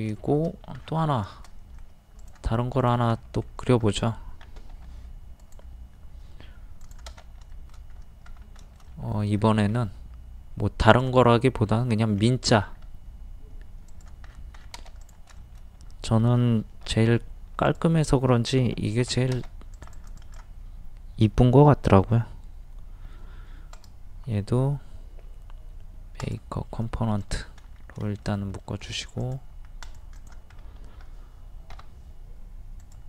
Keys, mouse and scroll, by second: 0.2 shift+middle click, 0.8-1.1 scroll down 1, 1.6 middle click, 2.2 click, 3.2 middle click, 4.8 m, 5.4 click, 7.5 shift+scroll up 1, 7.5 middle click, 7.9 scroll down 1, 8.0 scroll up 1, 8.6 shift+middle click, 9.4 scroll up 1, 9.7 typing, 10.9 click, 12.1 scroll up 1, 13.9 click, 14.3-14.6 scroll down 1, 15.0 click, 15.4 shift+middle click, 16.9 p, 17.7-18.7 drag, 19.7 click, 23.8 right click, 26.2 click, 27.7 scroll down 1, 28.0 shift+middle click, 28.9 scroll up 1, 29.2 click, 30.5-30.8 scroll up 1, 31.8 o, 32.8 click.